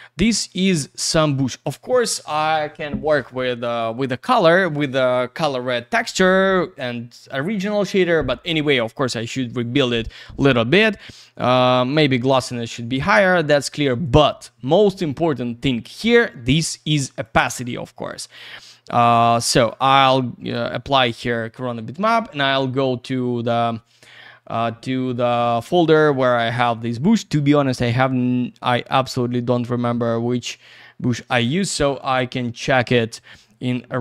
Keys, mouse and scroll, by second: 0.3 click, 1.1 click, 6.8 click, 11.4 click, 14.0 click, 14.9 middle click, 15.6 middle click, 17.2 click, 18.1 click, 19.6 click, 20.4 click, 31.6 click, 32.5 click, 33.5-34.0 scroll down 1.